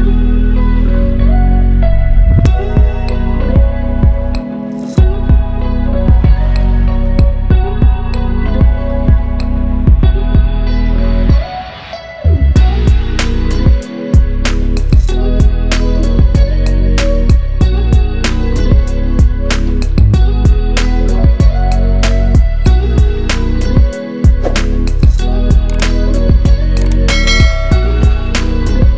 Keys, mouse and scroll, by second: 5.8 ctrl+z, 6.1-7.7 drag, 8.9-9.3 click, 11.9-12.3 drag, 15.4 click, 18.7-21.9 drag, 22.8 ctrl+t, 23.4-23.9 alt+click, 24.5-27.1 shift+drag, 27.1 click, 27.5 Right.